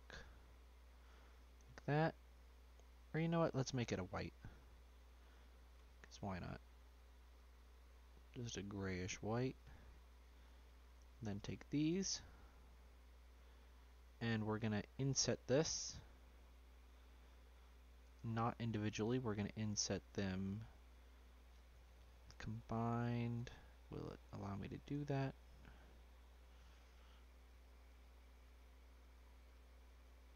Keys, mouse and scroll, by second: 0.9-1.7 scroll up 5, 1.3 shift+middle click, 1.7-4.0 shift+middle drag, 4.0 click, 5.4 click, 6.0-7.3 middle drag, 7.3 click, 10.5 click, 11.1 shift+click, 11.8 shift+click, 12.2-14.9 middle drag, 18.9-23.3 drag, 25.6 click, 26.8 click, 27.8 click, 28.4 click, 29.0 click, 29.5 click.